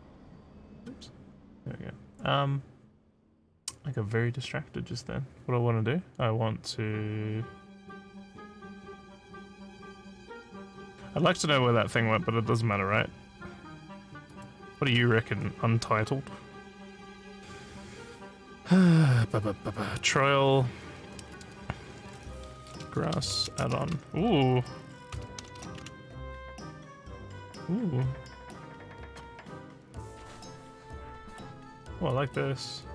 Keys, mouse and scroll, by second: 0.7 click, 8.1 click, 9.6 click, 14.3 click, 14.8 click, 22.6-24.0 typing, 25.4 d, 25.6 d, 29.0 click.